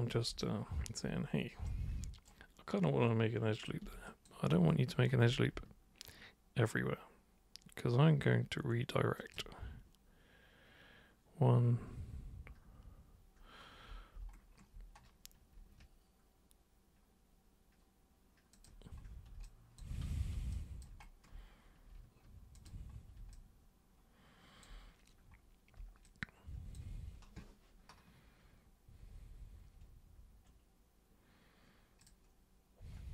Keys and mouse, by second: 0.4-1.0 alt+super+drag, 1.6 super+right click, 3.5 super+click, 4.1 alt+super+click, 9.1 ctrl+super+click, 18.5 ctrl+click, 19.5 alt+click, 20.5 alt+click, 22.6 ctrl+super+click, 23.3-24.6 alt+super+drag, 26.0 alt+super+click, 32.0 super+click.